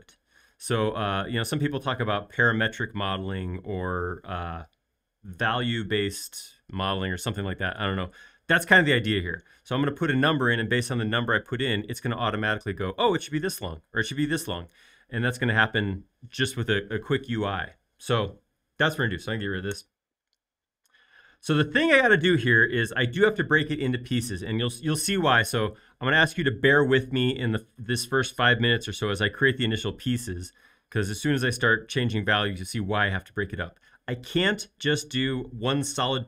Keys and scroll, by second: 19.8 BackSpace, 20.4 BackSpace.